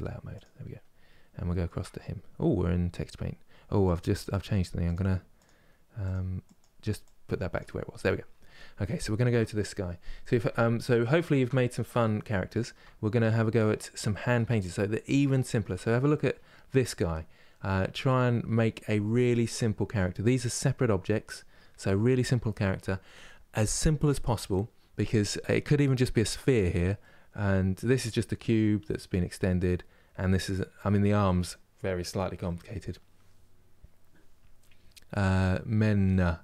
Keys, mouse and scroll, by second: 0.0 click, 0.5 scroll down 1, 1.2-5.1 shift+middle drag, 5.1-7.9 drag, 7.9-8.9 scroll up 1, 8.9 KP_Decimal, 9.8 scroll down 1, 10.4-10.8 scroll down 1, 10.8 shift+middle click, 11.3-12.2 scroll down 2, 12.2 shift+middle click, 12.6-13.8 scroll up 5, 13.8 shift+middle click, 14.3 scroll up 2, 14.7 middle click, 15.4 Tab, 15.8-18.2 middle drag, 18.2-18.8 scroll down 1, 18.8-36.4 middle drag.